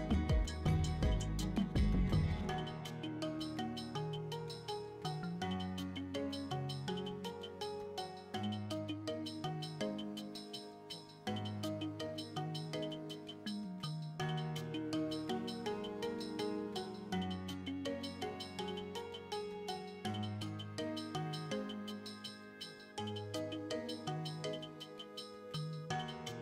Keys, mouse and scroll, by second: 0.0 scroll up 3, 0.1 middle click, 0.3 scroll down 1, 0.4 scroll up 1, 0.7 shift+middle drag, 1.3 shift+click, 1.5 ctrl+z, 1.9 Tab, 1.9 middle click, 2.2 KP_1, 2.6 shift+middle click, 2.7 scroll down 3, 2.8 shift+middle click, 3.1 scroll up 1, 3.5 click, 3.8 right click, 4.0-7.9 typing, 5.0 right click, 6.3 shift+click, 6.8 right click, 8.1 click, 8.4 right click, 8.9 l, 9.2 g, 9.5 z, 10.1 shift+click, 10.9 right click, 11.0-15.1 typing, 11.9 shift+click, 12.3 right click, 13.8 click, 14.0 shift+middle click, 14.2 right click, 15.5 shift+click, 15.6 Tab, 15.8 ctrl+z, 16.4 shift+click, 17.1 ctrl+z, 17.1 middle click, 17.5 shift+click, 18.4 shift+click, 19.6 shift+click, 20.6 middle click, 21.1 scroll up 1, 21.1 middle click, 21.3 shift+middle click, 21.5-21.9 scroll down 2, 21.7 Tab, 22.0 Tab, 22.2 right click, 22.3 x, 22.5 scroll down 1, 22.5-23.1 middle drag, 24.4 middle click, 24.6 shift+middle drag, 24.9 middle drag, 25.0 shift+middle click, 25.3 right click, 25.5 middle click, 25.6 scroll up 2, 25.7 middle drag.